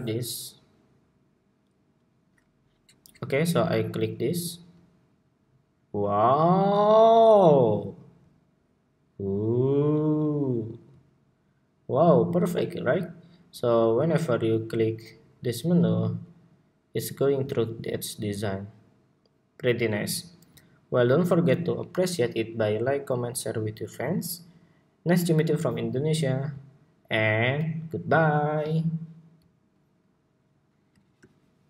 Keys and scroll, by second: 31.4 shift+super+2.